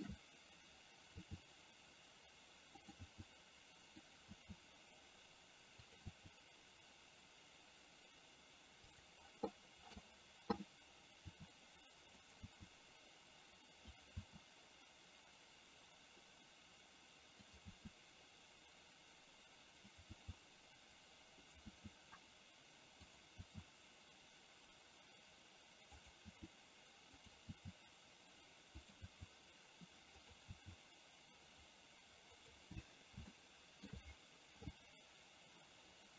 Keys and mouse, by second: 3.2 e, 12.5 e, 20.2 e, 32.5 e, 33.5 shift+middle click.